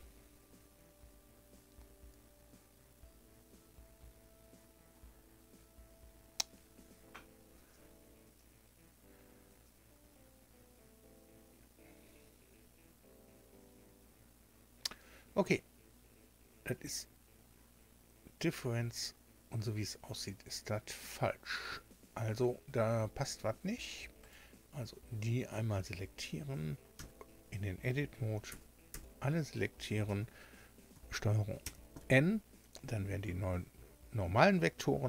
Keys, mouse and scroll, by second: 24.2 right click, 26.9 Tab, 28.4 a, 28.9 a, 31.6 ctrl+n.